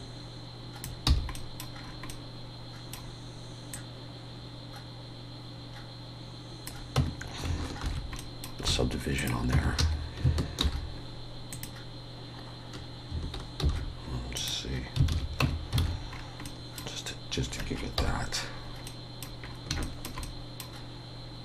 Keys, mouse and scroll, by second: 1.1 f, 1.4 middle click, 1.8-2.3 scroll up 3, 2.1 middle click, 3.7 click, 7.9 Tab, 7.9 ctrl+2, 8.2 middle click, 8.7 alt+a, 9.2 click, 9.5 Tab, 9.8 a, 10.6 alt+n, 15.1 alt+a, 15.4 Tab, 15.8 alt+a, 16.1-16.6 scroll down 3, 16.5 middle click, 17.1 scroll up 1, 18.0 KP_1, 18.9 middle click, 19.4-19.8 scroll up 3, 19.8 shift+middle click, 20.2 middle click.